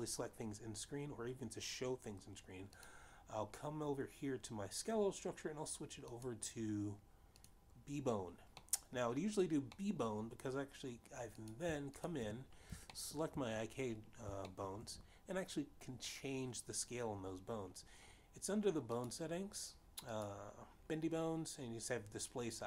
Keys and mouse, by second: 4.0 click, 7.3 click, 9.9 middle click, 11.1 middle click, 12.7 click, 13.1 shift+click, 14.1 shift+middle click, 15.8 shift+middle click, 20.3 click, 21.3 click.